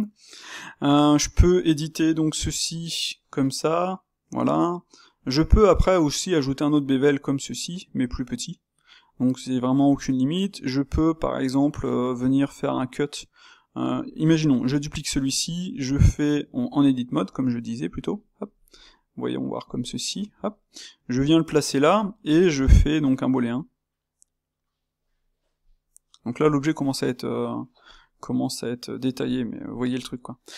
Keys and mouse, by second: 1.4 click, 2.5 g, 5.3-14.5 middle drag, 14.5 shift+d, 15.3 s, 16.7 Tab, 17.1 s, 18.6 s, 19.7 middle click, 20.1 Tab, 21.0 g, 21.9 shift+click, 28.3-30.5 middle drag.